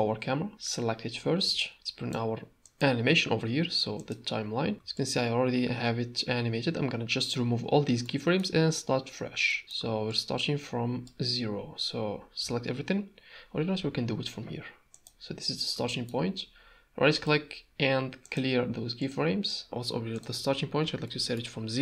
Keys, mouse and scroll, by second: 1.6 ctrl+click, 4.9-7.3 shift+drag, 8.0 middle click, 8.8-9.5 shift+drag, 9.6 middle click, 10.1-11.2 shift+drag, 12.4 a, 13.8 n, 14.9 click, 15.9 shift+middle click, 17.1-18.4 drag, 19.1 click, 20.1-21.8 drag.